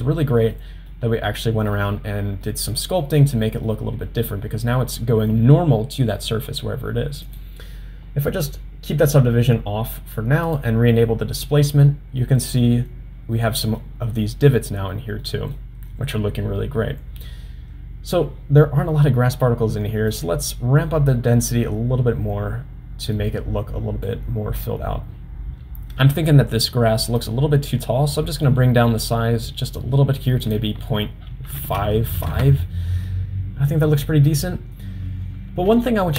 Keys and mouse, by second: 0.5-1.7 middle drag, 2.4-3.1 middle drag, 3.2-6.7 middle drag, 10.5 click, 12.3 middle click, 13.4-13.8 middle drag, 15.2-15.6 middle drag, 20.5-24.1 drag, 27.3-30.0 drag, 30.6-33.3 drag.